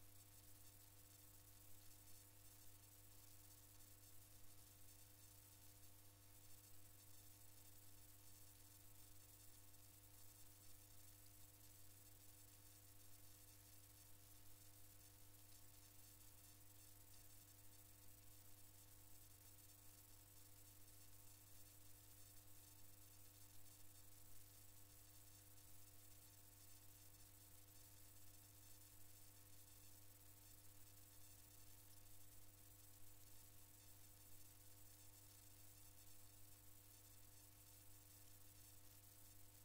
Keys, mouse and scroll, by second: 1.3-2.1 scroll up 2, 2.1-2.6 scroll up 1, 4.1-6.3 drag, 7.3 click, 12.4-15.8 drag, 26.1 alt+KP_1, 27.3 alt+KP_1, 28.8 alt+KP_4, 29.9 alt+KP_4, 31.6 alt+KP_2, 32.3 alt+KP_2, 33.2 alt+KP_2, 33.9 alt+KP_2, 34.6 alt+KP_2, 37.5 alt+KP_5, 38.2 alt+KP_5.